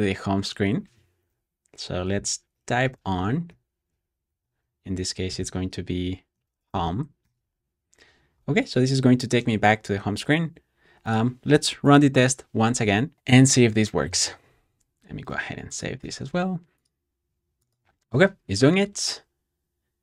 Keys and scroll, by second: 0.7 typing, 1.8-7.2 typing, 12.1 Return, 15.9 super+s.